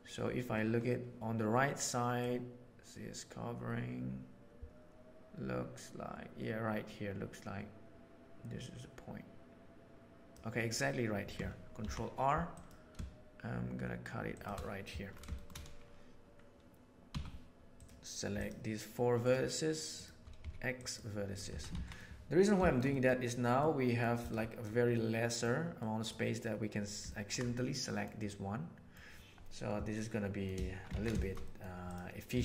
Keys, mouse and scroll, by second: 2.1-5.0 drag, 5.0-9.9 right drag, 9.9 click, 11.7 ctrl+r, 15.3 shift+middle click, 17.1 1, 17.7 middle click, 19.1 shift+click, 20.3 x, 21.5 Tab, 21.6 alt+a, 21.9-22.2 middle drag, 22.6 shift+middle click, 22.9 middle click, 23.5-23.9 middle drag, 24.9-25.4 middle drag, 25.7 middle click, 27.1 ctrl+middle click, 27.5-27.9 middle drag, 28.2-28.9 middle drag, 29.9-30.4 middle drag, 30.9 alt+a, 31.1 shift+middle click, 31.4 middle click, 32.3 ctrl+middle click.